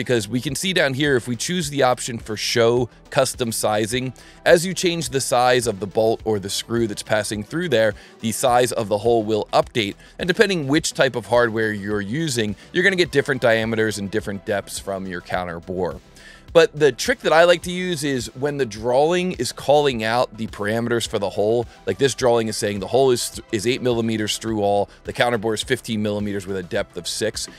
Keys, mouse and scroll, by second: 1.5 click, 2.6 click, 4.3 click, 6.3 click, 9.8 click, 11.7 click, 19.0-20.4 drag, 20.8 alt+1, 21.2 click, 22.1 click, 24.2 click, 26.8 alt+1.